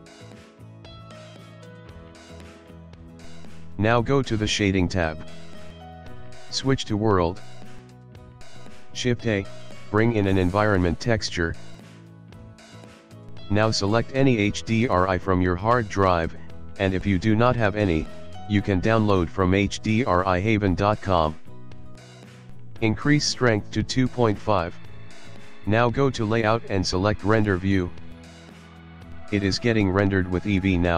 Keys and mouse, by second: 1.6 middle click, 2.3 s, 26.0 click, 28.3 click, 28.8 click, 29.3 middle click, 29.6 middle click.